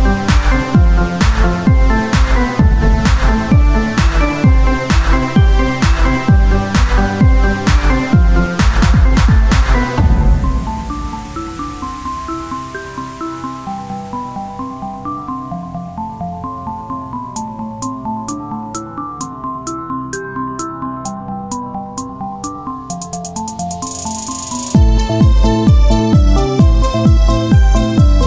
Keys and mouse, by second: 0.1 Tab, 1.6 Tab, 4.1-5.3 drag, 5.3 p, 5.9 Tab, 8.0 t, 9.2 t, 10.8 s, 13.3 click, 14.1 s, 17.1 s, 17.8 click, 18.4 click, 18.5 KP_1, 19.6 t, 20.4 t, 20.8 r, 22.2-23.8 drag, 24.6 click, 25.2 Tab.